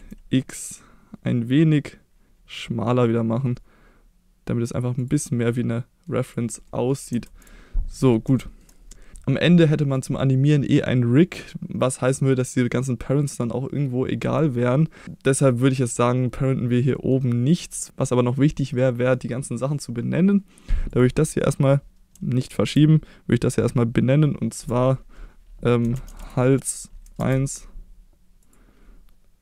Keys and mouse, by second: 4.9 click, 5.4-6.0 middle drag, 6.2 click, 6.6 middle drag, 7.2 ctrl+s, 7.9 middle click, 8.3 middle drag, 9.2-10.0 middle drag, 15.0 middle click, 17.0 middle click, 21.0 click, 22.5 ctrl+z, 24.6 F2, 28.4 click.